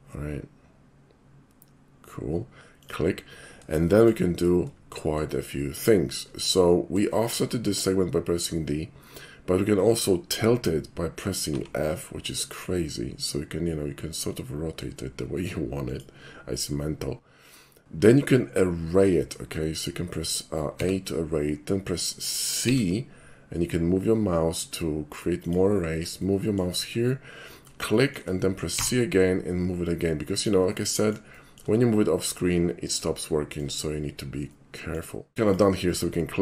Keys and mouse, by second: 2.8 click, 3.9 shift+middle click, 4.9 shift+middle click, 6.0 shift+middle click, 7.1-7.4 shift+middle drag, 9.3 shift+middle click, 11.5 f, 15.9 click, 18.5 middle click, 19.3 middle click, 20.8 a, 22.6 c, 25.5 click, 25.8 middle click, 26.2-26.6 shift+middle drag, 28.0 shift+middle click, 28.8 c, 30.4 click, 30.7-31.2 middle drag, 31.3 shift+middle drag, 33.2-33.6 shift+middle drag, 34.5-35.0 shift+middle drag, 36.1-36.4 middle drag.